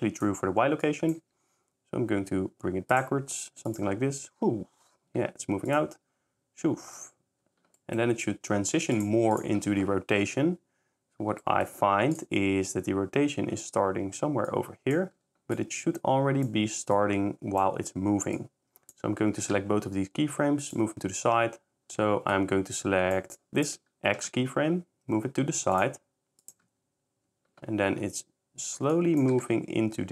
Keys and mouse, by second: 0.2 click, 0.8 drag, 1.2 g, 3.7 click, 3.9 s, 5.7 shift+click, 5.9 shift+s, 8.9 shift+click, 12.2 click, 14.5 click, 15.1 s, 15.5 shift+click, 16.9 shift+click, 18.4 click, 19.4 g, 19.5 x, 22.3 click, 23.4 click, 24.1 g, 24.3 x, 28.9 shift+drag, 29.3 shift+g, 29.4 x.